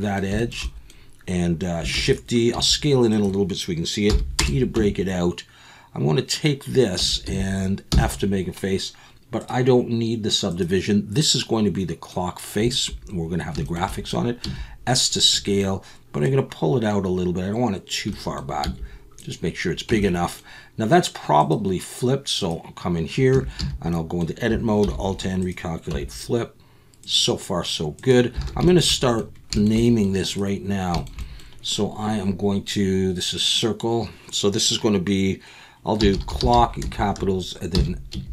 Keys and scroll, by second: 1.9 shift+d, 2.5 s, 4.1 p, 4.8 Tab, 7.0 Tab, 7.3 a, 7.9 f, 14.4 s, 18.6 s, 19.9 Tab, 23.3 Tab, 23.6 a, 24.8 alt+n, 25.9 Tab, 28.4 alt+a.